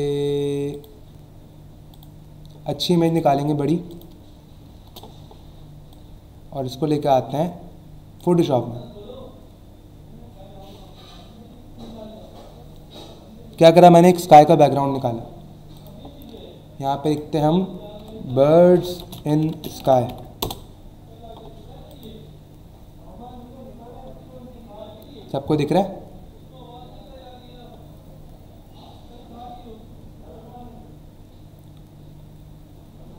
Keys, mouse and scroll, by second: 0.7 click, 1.9 click, 2.1 click, 3.1 right click, 3.9 click, 4.8 Return, 5.9 click, 15.7 click, 17.0 click, 17.7-20.3 typing, 20.4 Return, 21.9 click, 24.2 scroll down 1, 24.7 scroll down 1, 25.3-27.4 scroll down 5, 27.8 scroll down 1, 28.5 scroll down 1, 29.1 scroll down 1, 29.7 scroll down 1, 30.3 scroll down 1, 30.8 scroll down 1, 31.6 scroll down 1, 32.2 scroll down 1, 32.8 scroll down 1.